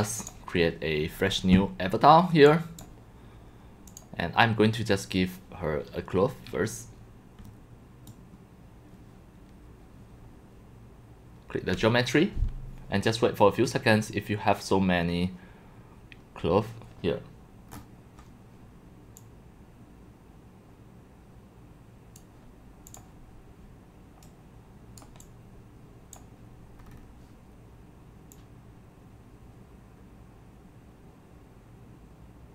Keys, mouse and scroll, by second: 0.0 click, 2.5-2.8 drag, 3.9 right click, 6.9-8.1 drag, 14.0-14.7 scroll down 1, 14.7-15.8 scroll down 1, 17.7 middle click, 17.7 scroll down 7, 19.2 click, 20.0-22.2 middle drag, 20.0-20.4 scroll, 23.0 click, 25.2-25.8 drag, 26.1 drag, 26.8 scroll, 26.8 scroll up 1, 27.0 scroll.